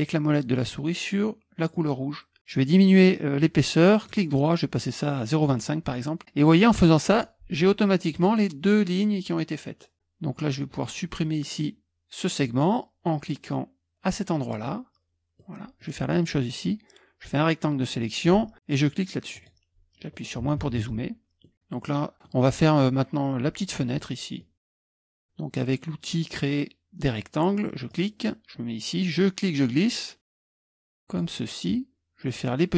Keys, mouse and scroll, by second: 5.4-6.9 middle drag, 7.9 middle click, 8.1-10.5 drag, 14.5 middle click, 15.4-16.5 drag, 20.4 KP_Subtract, 24.1 middle click, 24.6 click, 25.0-27.9 middle drag, 27.9 click, 28.5-31.7 drag.